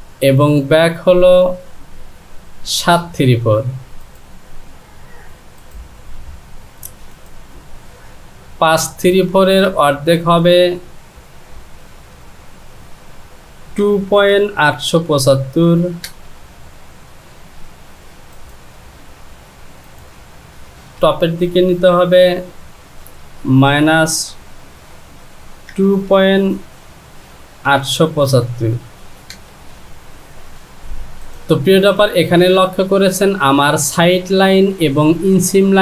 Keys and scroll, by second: 9.9 space, 15.4 KP_7, 15.4 KP_5, 16.1 Return, 20.7 space, 23.7 KP_Subtract, 25.7 KP_2, 27.7 KP_8, 29.3 Return.